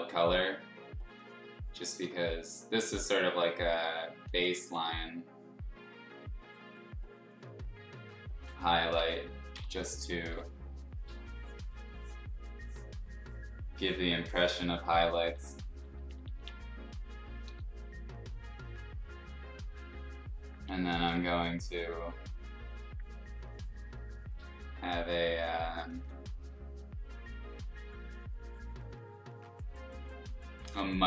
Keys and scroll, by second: 2.0 x, 4.2 ctrl+z, 4.7 x, 8.9 ctrl+z, 10.1 ], 10.3 ], 15.2-16.3 typing, 17.4 ], 20.9 ], 21.1 ], 21.3 ], 25.9 ctrl+z, 30.6 ctrl+z.